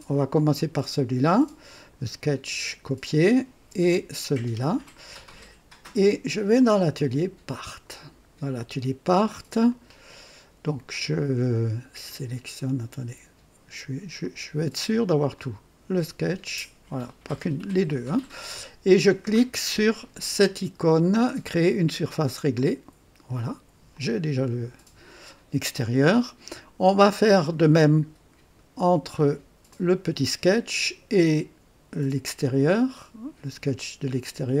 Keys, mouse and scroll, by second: 0.3 click, 1.7 click, 4.2 ctrl+click, 6.5 click, 7.6 click, 9.6 click, 11.1 ctrl+click, 12.1 ctrl+click, 14.2 click, 15.3 click, 16.9 ctrl+click, 22.5 click, 23.9-27.7 drag, 29.6 click, 32.4 click, 32.9 scroll down 2.